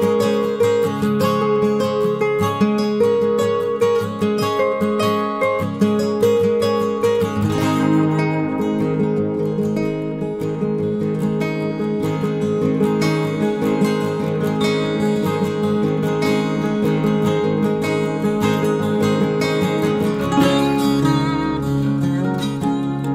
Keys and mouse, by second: 0.1 k, 10.8 j, 13.4 k, 21.9 k.